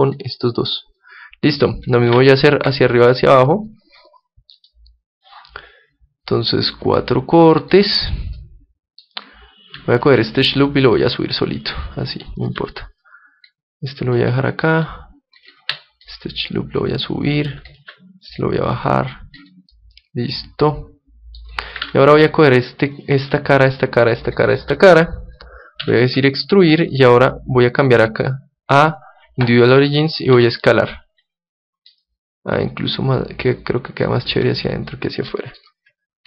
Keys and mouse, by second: 2.1 ctrl+r, 8.4-9.7 drag, 9.6 middle click, 10.0-11.9 right drag, 10.8-12.6 drag, 11.7 middle click, 12.5 middle click, 12.5-14.3 right drag, 13.0-14.6 drag, 13.0-14.2 middle drag, 14.6 middle click, 14.8-16.1 right drag, 16.1-17.1 middle drag, 17.1 click, 17.7 middle click, 17.8 right click, 18.4-19.5 middle drag, 19.5 click, 19.8-21.6 middle drag, 21.8 ctrl+Tab, 23.0-26.2 right drag, 25.8 e, 26.6-29.7 drag, 30.4 s, 32.3-34.7 drag, 34.3 Tab, 34.9 Tab, 34.9-36.2 middle drag.